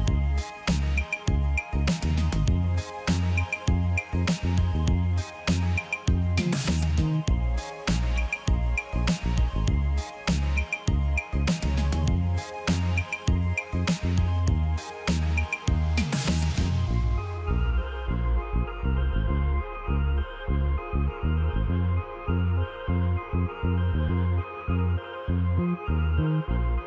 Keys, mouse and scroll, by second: 0.5 ctrl+click, 3.1 ctrl+j, 3.7 ctrl+click, 6.0 ctrl+j, 6.6 ctrl+click, 8.8 ctrl+j, 9.4 ctrl+click, 11.6 shift+click, 14.2 shift+click, 14.6 ctrl+j, 15.3 ctrl+j, 15.6 ctrl+click, 17.5 ctrl+j, 18.0 ctrl+j, 18.2 ctrl+click, 20.4 ctrl+j, 21.1 ctrl+click, 23.1 ctrl+j, 24.0 ctrl+click.